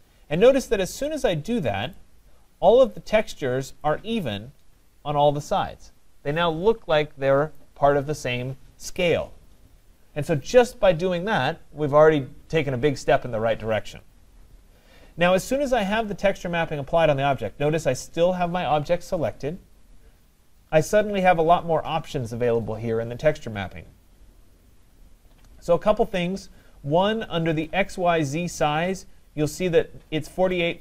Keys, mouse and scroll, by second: 0.6 middle click, 0.6 middle click, 2.0 right click, 3.8 right click, 7.6 right click, 10.1 middle click.